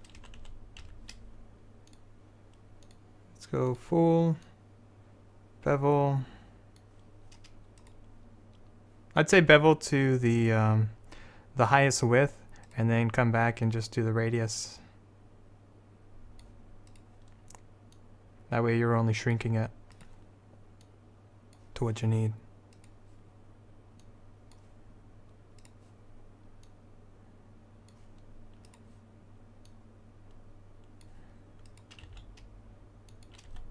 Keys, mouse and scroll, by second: 0.3 a, 0.5 a, 1.0 a, 12.8-15.1 right drag, 13.8-16.5 drag, 17.0-24.4 right drag, 18.1-20.1 drag, 21.0 click, 24.2 click, 32.2 s, 33.6 r.